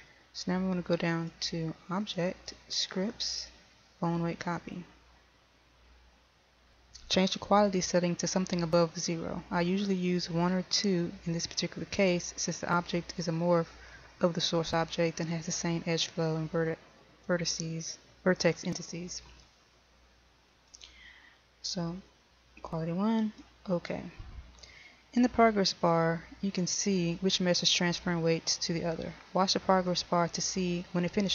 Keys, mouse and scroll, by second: 2.1 click.